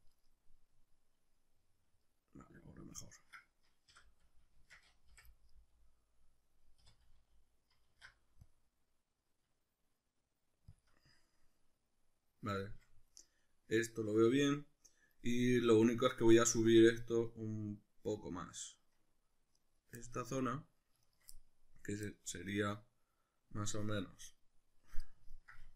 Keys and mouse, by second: 0.3-3.2 middle drag, 3.2 right click, 3.9 l, 4.6 shift+Tab, 5.2 o, 5.5-10.8 middle drag, 6.8 3, 7.9 alt+e, 10.8 shift+click, 10.9-19.5 middle drag, 19.5 right click, 20.0-21.0 shift+middle drag, 21.0 shift+right click, 21.2-25.7 middle drag.